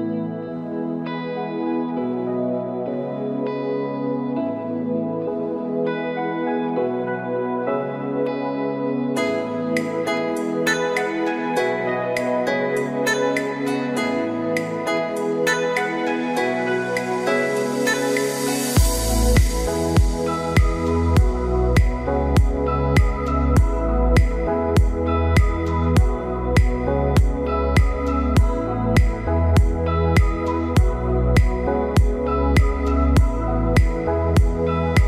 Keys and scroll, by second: 34.3 ctrl+d.